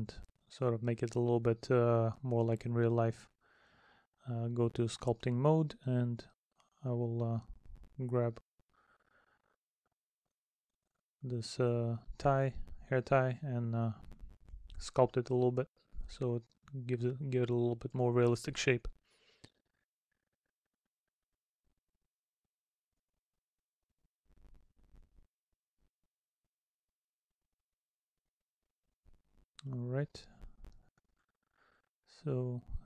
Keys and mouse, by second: 0.7 middle click, 1.9 middle click, 4.0 middle click, 5.5 middle click, 7.2 middle click, 8.1 middle click, 11.5 middle click, 12.4 middle click, 13.0 middle click, 14.7 middle click, 16.2 middle click, 16.8 middle click, 17.8 middle click, 18.5 middle click, 20.3 middle click, 23.9 middle click, 25.0 middle click, 26.4 middle click, 27.2 middle click, 29.8 middle click, 30.6 middle click, 31.7 middle click.